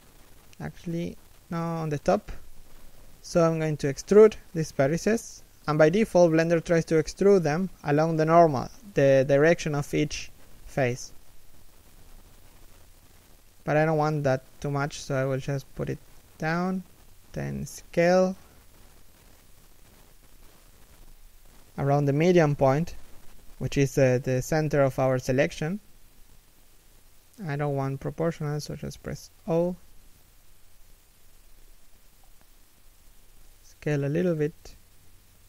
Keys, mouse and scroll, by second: 2.8 e, 26.5 s, 28.8 o, 35.3 s.